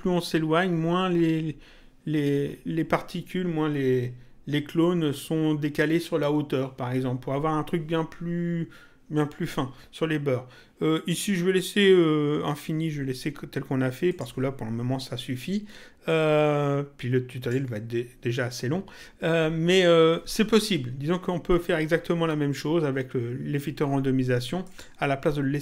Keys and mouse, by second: 14.1 click, 16.1 click, 24.7 click.